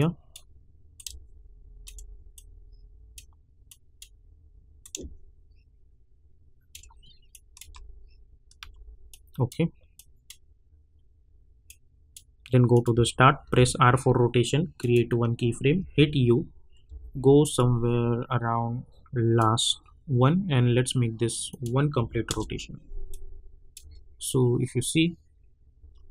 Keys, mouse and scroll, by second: 7.6 space, 9.1-12.7 drag, 13.4 r, 14.8 click, 15.8 u, 16.8 u, 17.5-21.4 drag, 22.3 Return, 23.1 click, 23.8 space.